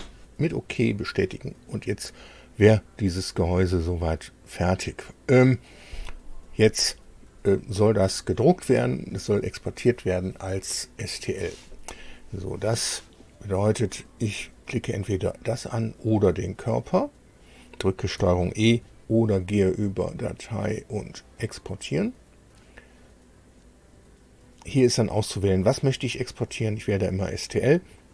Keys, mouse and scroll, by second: 0.2 scroll up 2, 0.8 scroll down 2, 1.2-2.5 middle drag, 2.5-5.0 drag, 14.2 click, 15.0-15.3 scroll up 2, 16.0 click, 19.3 click, 21.0 click.